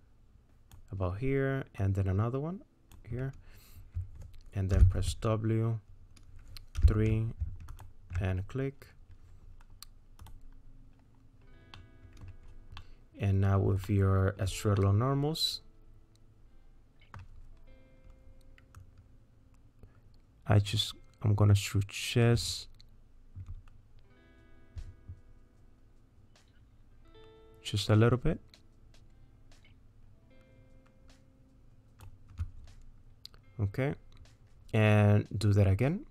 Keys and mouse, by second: 1.8-2.9 drag, 4.7 w, 6.8 3, 7.7 alt+click, 10.2 click, 11.7 middle click, 12.8 click, 13.0 middle click, 13.8 shift+middle click, 14.8-17.2 middle drag, 18.9-32.0 drag.